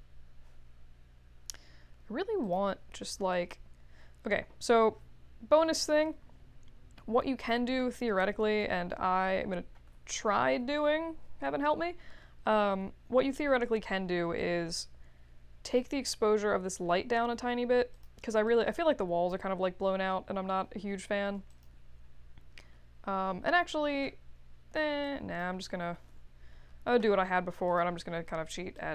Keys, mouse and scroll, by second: 2.4 click, 9.9 ctrl+s, 10.6 Return, 14.3 click, 17.9 click, 18.4-19.2 drag, 21.5 click, 28.7 drag.